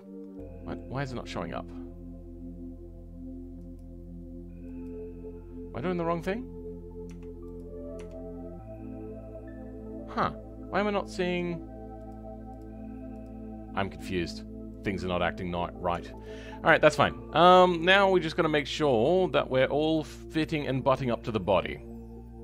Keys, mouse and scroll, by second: 0.0-0.3 scroll up 3, 0.3-3.6 middle drag, 3.6-6.6 drag, 6.6-7.0 scroll down 5, 7.0 Tab, 8.3-11.9 scroll up 4, 11.9-12.5 scroll up 1, 12.5-15.0 drag, 15.0-15.4 scroll down 6, 15.9 Tab, 16.3 scroll down 4, 16.6-20.0 middle drag, 20.0 click, 20.3-21.0 scroll up 6, 21.0-22.4 middle drag.